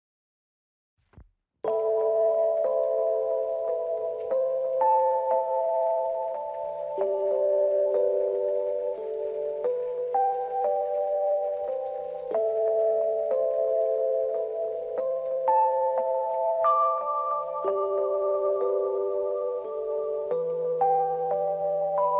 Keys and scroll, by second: 0.4 h, 1.7 space, 2.1 ctrl+=, 2.5 space, 5.2 ctrl+-, 14.7 ctrl+d, 20.8 space.